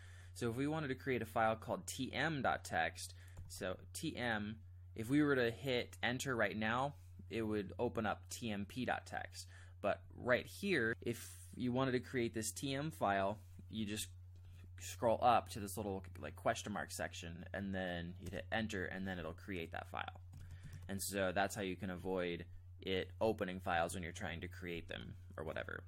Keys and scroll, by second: 3.1-4.0 typing, 10.0 Up, 13.7 Down, 14.4 Up, 18.2 Return, 20.3-21.4 typing.